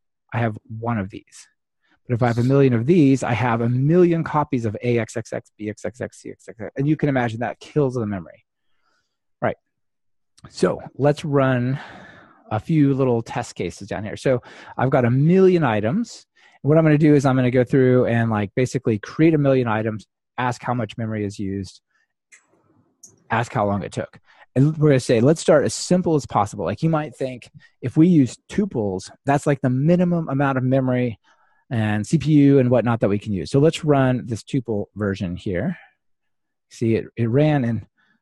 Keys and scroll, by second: 35.3 ctrl+r.